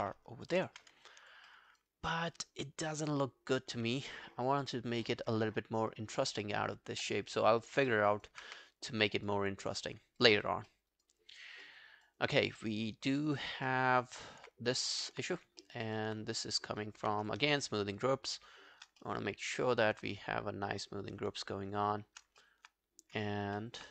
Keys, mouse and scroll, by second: 0.6 ctrl+i, 0.8 ctrl+scroll down 1, 1.1 alt+click, 1.5 alt+middle click, 1.7 alt+right click, 1.9 alt+click, 7.2 alt+middle click, 7.5 alt+scroll down 1, 7.9 alt+middle click, 8.1 alt+right click, 8.5 q, 9.8 double click, 10.0 scroll down 2, 10.2 alt+click, 10.7 alt+middle click, 10.9 alt+right click, 11.2 alt+click, 11.7 alt+middle click, 11.9 alt+right click, 12.2 alt+click, 12.6 alt+middle click, 12.9 alt+click, 13.7 alt+middle click, 13.9 alt+right click, 14.2 alt+click, 15.0 alt+middle click, 15.6 alt+middle click, 15.9 alt+right click, 16.2 right click, 17.0 q, 17.7 shift+click, 18.0 shift+click, 19.0 alt+middle click, 19.4 alt+scroll down 1, 19.7 alt+click, 21.7 shift+click, 21.8 shift+click, 22.4 alt+middle click, 23.4-23.9 alt+scroll up 3, 23.6 alt+middle click.